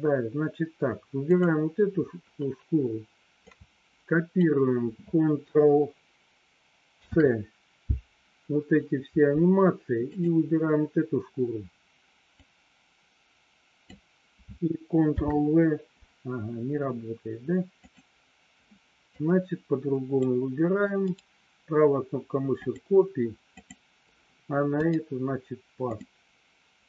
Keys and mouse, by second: 3.6 click, 7.0 ctrl+c, 12.7-14.2 drag, 15.1 ctrl+v, 17.8 click, 19.2-20.3 drag, 21.1-23.0 right drag, 23.7 click, 25.0 right click.